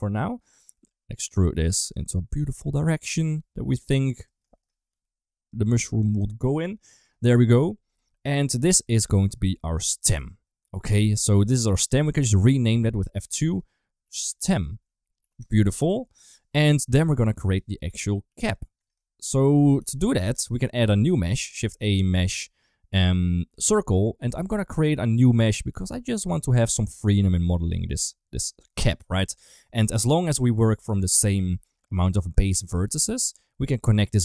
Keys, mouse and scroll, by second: 0.4 e, 1.4 s, 2.0 r, 2.9 e, 4.4 shift+middle click, 5.6 s, 10.8 Tab, 11.0-11.8 middle drag, 13.1 F2, 15.7 ctrl+s, 21.0 middle click, 21.4 shift+a, 25.6 g, 26.9 g, 27.7 g, 28.6 shift+middle click, 32.0 Tab, 33.1 2.